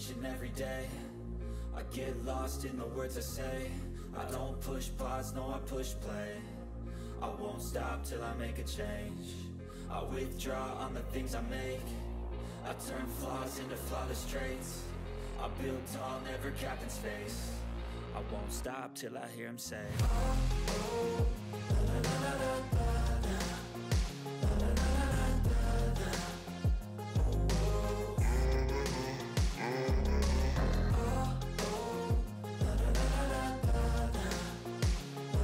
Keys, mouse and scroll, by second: 1.9 ctrl+scroll down 1, 2.3 click, 2.7 ctrl+scroll up 1, 2.9 ctrl+middle click, 3.8 ctrl+scroll down 1, 5.6 ctrl+scroll down 1, 5.9-6.2 ctrl+scroll up 1, 6.2 click, 7.0 click, 10.2-11.2 click, 11.6 ctrl+scroll up 1, 12.2 ctrl+scroll down 1, 12.3-13.1 click, 13.6 shift+click, 14.5 ctrl+g, 14.6 ctrl+click, 15.1-15.6 scroll down 2, 15.6 click, 16.1-18.5 typing, 16.9 click, 17.6 click, 18.2 click, 18.6 ctrl+scroll down 1, 20.0-20.5 ctrl+scroll down 2, 20.3 ctrl+middle click, 20.6 click, 20.9-21.3 scroll down 1, 21.3 click, 22.6 shift+click, 24.7 Down, 28.1 Left, 30.2 Down, 31.2 click, 31.5 ctrl+scroll up 1, 32.0-33.2 click, 33.7 ctrl+scroll down 1, 34.2 click, 34.6 right click.